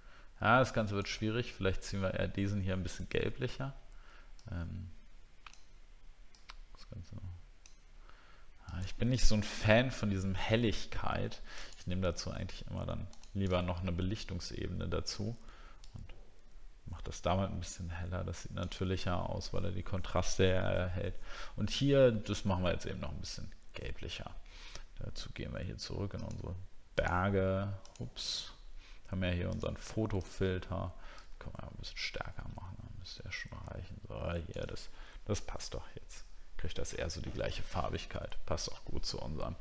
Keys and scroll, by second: 34.8 alt+scroll down 1.